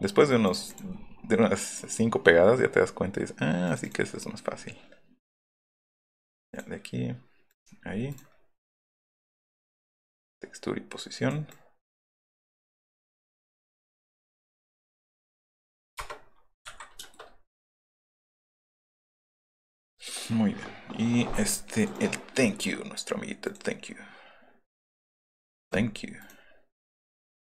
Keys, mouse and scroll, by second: 0.4 click, 0.6 click, 1.7 click, 7.8 middle click, 8.0 right click, 8.9 click, 9.9 click, 15.9 Return, 16.6 Escape, 17.4 click, 17.6 click, 18.9 click, 19.1 F8, 19.8 click, 21.0-22.0 drag, 23.4 click, 25.6 click, 26.2 right click, 27.2 click.